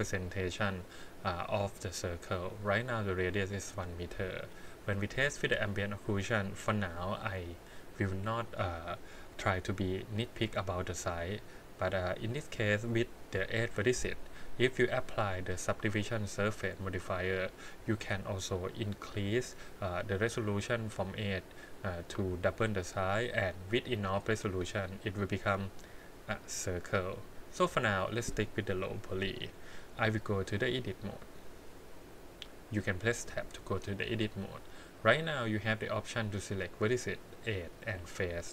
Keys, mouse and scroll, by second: 11.6 click, 14.8 click, 15.5-20.3 drag, 20.3 scroll up 3, 23.7 click, 24.0 click, 24.2 click, 27.7 click, 29.9 scroll down 2, 30.8 click, 31.2-33.2 drag, 34.0 middle click, 36.9 click, 37.7 click.